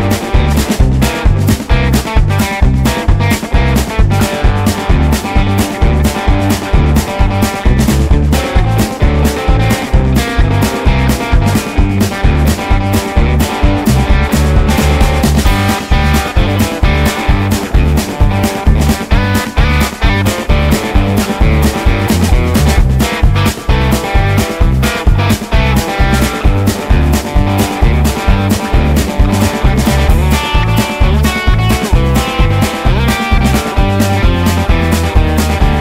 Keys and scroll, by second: 19.2-20.7 typing.